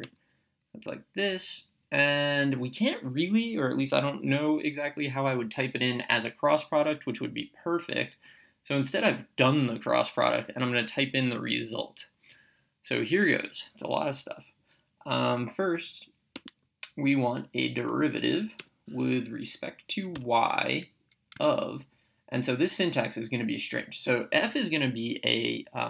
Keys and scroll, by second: 0.1 ctrl+(, 18.7 Return, 20.2 y, 21.4 Tab.